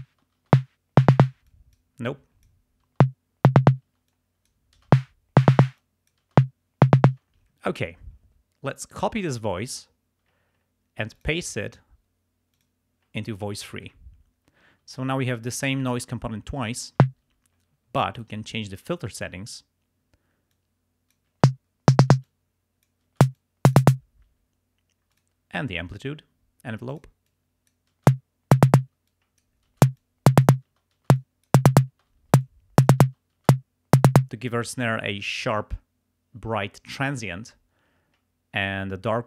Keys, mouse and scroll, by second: 0.2 space, 1.4 space, 1.5 click, 2.1 click, 3.0 space, 4.1 click, 5.0 space, 5.7 space, 5.8 click, 7.2 space, 9.3 click, 11.2 click, 12.6 click, 16.9 space, 18.2 click, 19.1 click, 20.5 click, 21.3 space, 22.1 space, 22.2 click, 23.2 space, 23.4 click, 24.3 space, 25.1 click, 27.0 click, 27.3 click, 28.1 space, 28.8 space, 29.1 click, 29.8 space, 30.1 click, 30.7 space, 31.3 click, 32.0 space, 32.5 click, 33.1 space, 34.1 space.